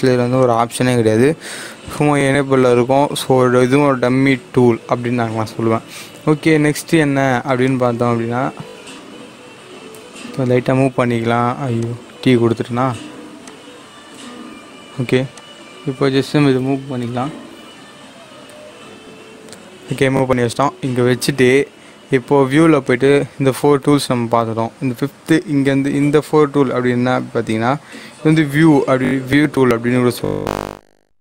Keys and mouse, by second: 7.6 click, 9.6-10.8 typing, 11.7 click, 14.0 t, 15.3 click, 16.9 g, 18.4 y, 20.7 click, 22.8 click.